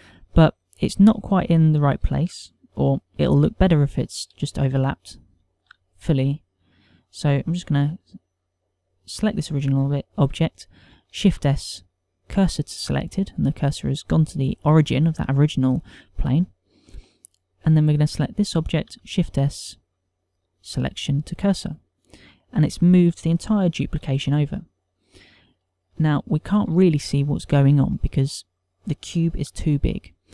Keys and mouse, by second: 1.4 middle click, 5.6 ctrl+middle click, 5.6 z, 6.2 shift+middle click, 6.8 ctrl+middle click, 7.5 click, 9.8 click, 11.9 shift+s, 18.1 click, 19.9 shift+s, 24.7 z, 25.6 middle click, 27.0 shift+middle click, 28.0 ctrl+middle click.